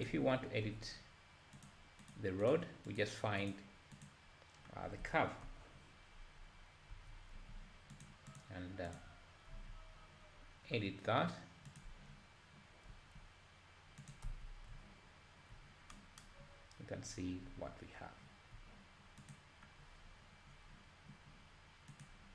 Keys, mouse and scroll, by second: 0.6 z, 0.8 z, 1.7 click, 2.1 click, 2.5 click, 3.0 click, 3.5 click, 4.1 click, 4.9 scroll down 2, 5.4 KP_7, 6.1-6.9 scroll up 1, 6.9 Tab, 7.5 z, 8.0 click, 8.9 click, 9.7 z, 11.7 click, 12.9 g, 14.3 Tab, 14.7 `, 16.5-17.1 scroll up 2, 17.1-17.4 scroll down 1, 17.4 `, 19.4 click, 19.8-20.5 scroll down 1, 20.5-21.1 scroll down 2, 21.1 scroll down 1.